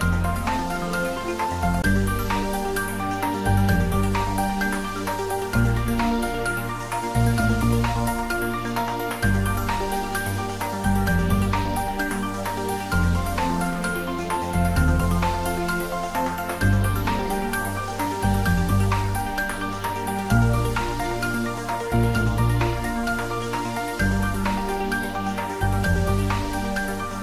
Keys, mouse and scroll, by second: 2.8 alt+shift+click, 5.3 alt+shift+click, 7.0 ctrl+z, 8.8 alt+shift+click, 17.8-18.1 scroll down 1, 22.2 click, 26.8 click.